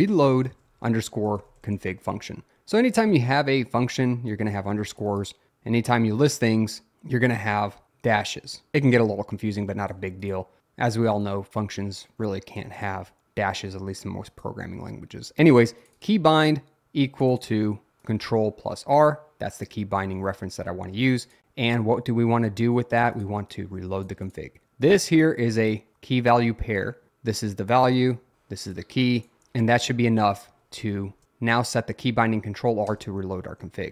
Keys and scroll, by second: 0.0-2.1 typing, 30.5 Escape, 30.9-31.7 typing, 33.0 Return.